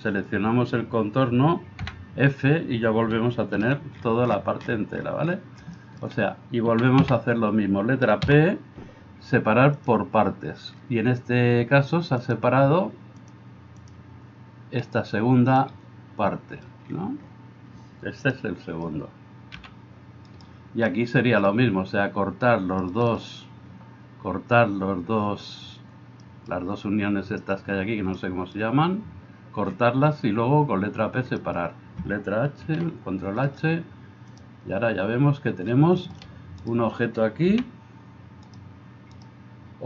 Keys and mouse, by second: 1.8 f, 3.6 alt+h, 4.7-6.6 middle drag, 6.7 a, 7.0 a, 8.3 p, 11.3-13.1 middle drag, 13.1-39.8 drag, 14.9-19.6 middle drag, 14.9-19.6 right drag, 19.6 g, 32.4 alt+h, 36.6 middle click, 36.6 right click, 37.5 g, 39.2 middle click, 39.2 right click.